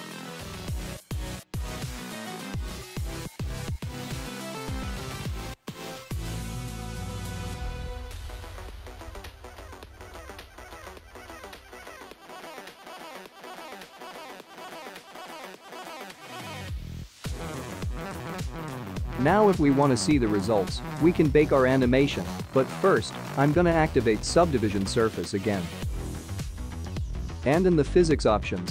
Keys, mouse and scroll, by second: 17.2 click, 20.7 click, 22.2 click, 23.7 click, 26.5 click, 27.1 click.